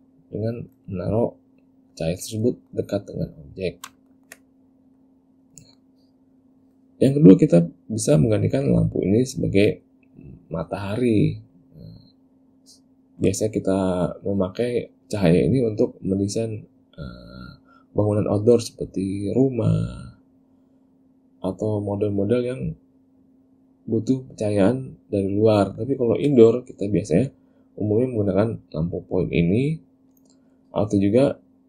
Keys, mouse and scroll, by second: 0.0 click, 1.1 middle click, 2.1 click, 2.7 middle click, 3.4 click, 4.1 ctrl+middle click, 4.3 ctrl+middle click, 5.1 click, 5.7 middle click, 11.0 click, 29.6 click.